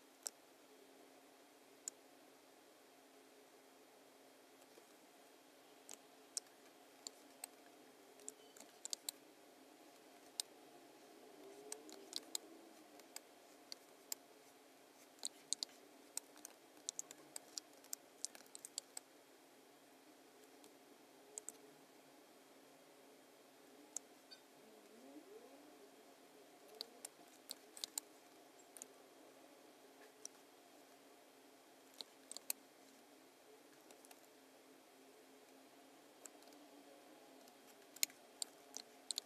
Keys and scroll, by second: 7.0 space, 8.3 alt+b, 8.9 space, 10.1 space, 11.4 space, 12.1 space, 12.9 space, 13.7 space, 15.6 space, 16.5 super+-, 17.0 space, 18.6 super+=, 18.7 space, 26.7 space, 27.8 space, 32.3 space, 33.8 space, 36.4 BackSpace, 37.3 BackSpace, 38.0 space, 39.1 space.